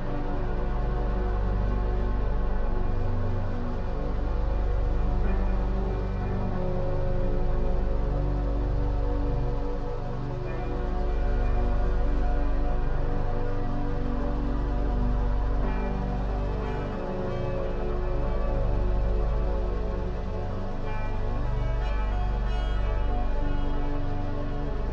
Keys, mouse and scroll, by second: 1.4-4.4 right drag, 6.4 click, 7.0 click, 8.3-9.5 middle drag, 9.5 3, 9.8 click, 10.7 Delete, 12.9-14.7 middle drag, 14.7-16.0 scroll up 2, 16.0 Tab, 16.7 click, 19.2 click, 20.9-23.9 drag.